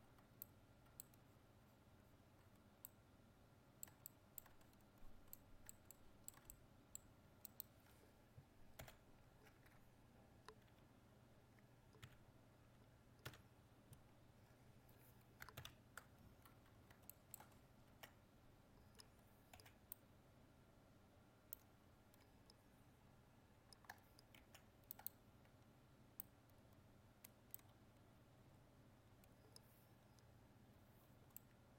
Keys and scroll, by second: 8.8 ctrl+l, 15.6 ctrl+1.